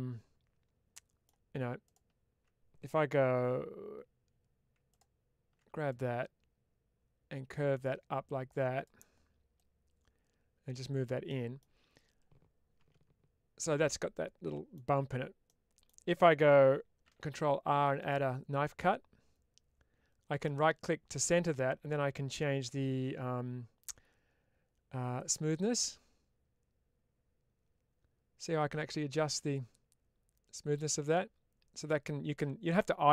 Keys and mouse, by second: 1.9 alt+click, 3.3 2, 5.8-8.7 drag, 9.5-10.9 drag, 11.1 middle click, 13.5-14.6 middle drag, 15.5 middle click, 20.3 right click, 25.0-33.1 drag.